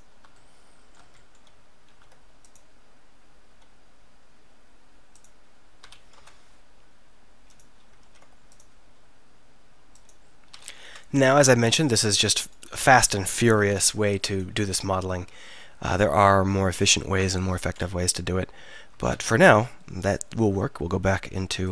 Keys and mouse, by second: 1.9 ctrl+r, 5.9 s, 8.1 ctrl+r, 10.6 s, 13.3 s.